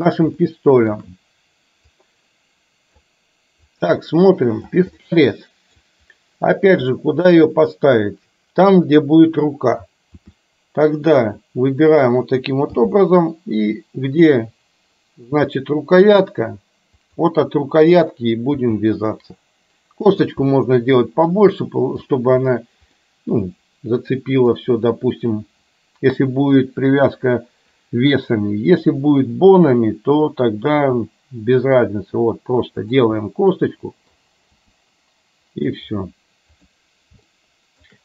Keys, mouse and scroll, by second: 0.4 shift+middle click, 2.0-3.0 drag, 3.7-4.8 drag, 5.0 middle click, 7.0 shift+middle click, 10.3 r, 12.8 g, 18.7 g, 20.7-22.2 middle drag, 23.0-24.5 middle drag, 30.8 g, 33.4 middle click, 34.7 g, 37.3 shift+middle click.